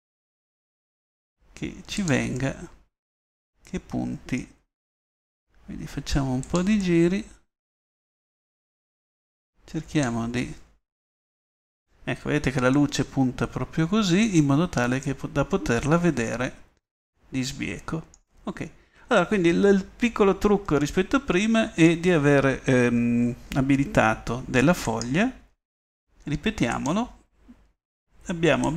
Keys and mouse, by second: 0.3 r, 2.7-3.8 middle drag, 4.7 r, 7.0-7.5 middle drag, 7.6 middle click, 8.2 middle drag, 13.3-13.8 middle drag, 14.9-19.1 middle drag, 21.2-22.4 middle drag, 26.0-27.1 middle drag.